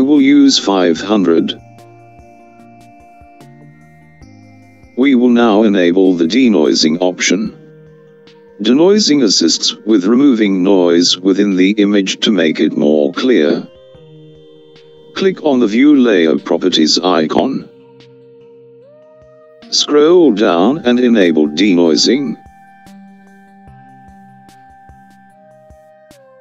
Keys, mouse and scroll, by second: 2.4 KP_0, 18.6 click, 23.0-23.4 scroll down 3, 23.9-25.2 scroll down 2, 25.2-26.4 scroll down 4.